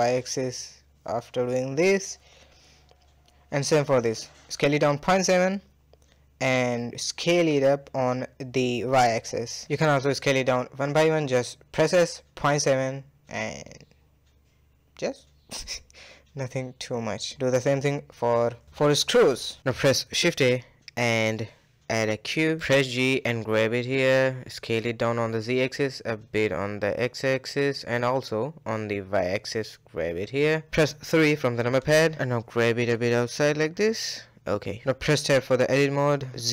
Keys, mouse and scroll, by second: 0.8 click, 1.1-2.0 middle drag, 2.0 shift+click, 2.4-3.2 middle drag, 3.2 s, 4.8-5.7 middle drag, 5.7 s, 7.0-7.8 middle drag, 7.8 scroll up 1, 8.0 middle click, 8.3-8.6 scroll down 1, 8.6-9.9 middle drag, 9.9 click, 10.4 s, 11.7 click, 12.7 s, 13.0-14.9 middle drag, 14.9 click, 15.6 s, 16.9 click, 18.0 s, 18.7 KP_1, 19.1-19.4 scroll down 3, 19.4 shift+middle drag, 19.6 a, 19.7 a, 23.2 g, 24.0 s, 24.8 g, 25.9 s, 26.1-27.0 middle drag, 27.0 s, 28.6 g, 29.6 s, 30.8 KP_3, 31.3-31.7 scroll up 7, 31.7 shift+middle click, 32.0 scroll up 2, 32.3 shift+middle drag, 32.4 g, 33.6-34.2 middle drag, 34.2-34.5 scroll down 4, 34.5-35.4 middle drag, 35.4 Tab, 35.8 click, 36.0 KP_1, 36.4 z.